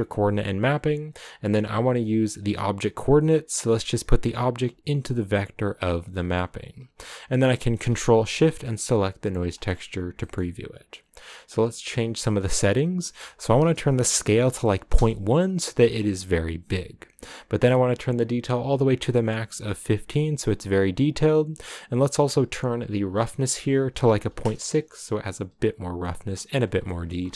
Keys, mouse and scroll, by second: 4.0 click, 6.1-8.4 drag, 14.9 click, 15.8-16.5 scroll down 2, 19.4-27.3 drag.